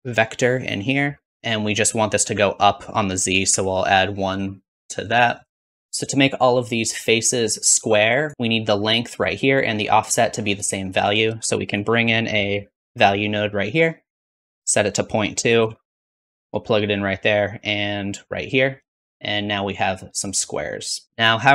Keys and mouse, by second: 2.7-5.8 drag, 5.5 shift+z, 6.4-8.2 shift+drag, 10.0-14.5 drag, 11.3 shift+a, 14.5 middle click, 14.9-17.9 drag, 17.9 alt+right click, 18.8 shift+z.